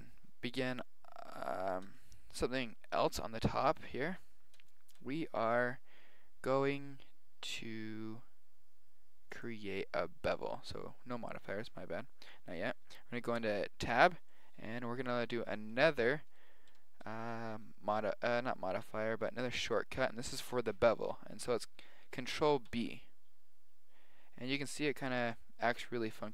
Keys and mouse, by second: 1.9-3.8 middle drag, 4.3-7.0 middle drag, 9.2-11.0 drag, 13.3 Tab, 14.3-17.0 middle drag, 14.8 KP_1, 16.7 KP_7, 21.0-22.6 middle drag, 22.6 ctrl+b.